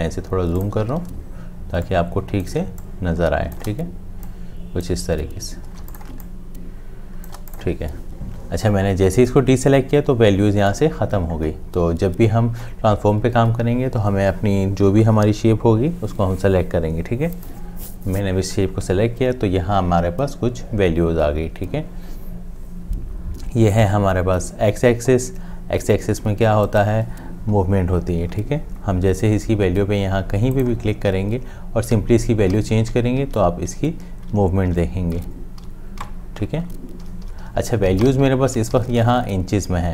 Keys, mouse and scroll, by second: 0.0 ctrl+space, 0.6 click, 1.0 ctrl+space, 2.6 space, 3.1 click, 5.8 space, 5.8 c, 6.5 click, 32.0 Up, 37.1 Down.